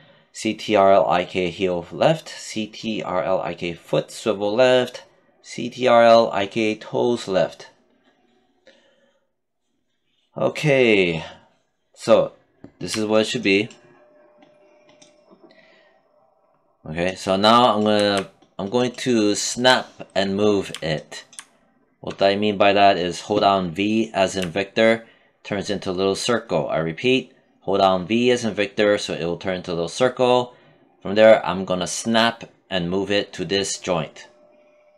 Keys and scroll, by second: 23.8 v.